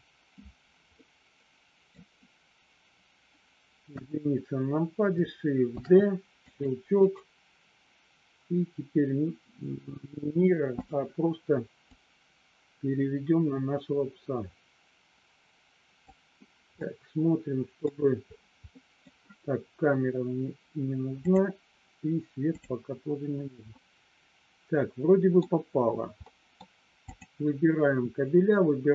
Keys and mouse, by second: 0.8 middle click, 3.8 KP_1, 5.7 shift+d, 6.5 click, 7.1-9.9 right drag, 10.8 click, 11.9-16.1 drag, 16.7-17.8 middle drag, 18.7 middle click, 21.2 click, 23.7-25.5 middle drag, 26.2 middle click, 27.1 click.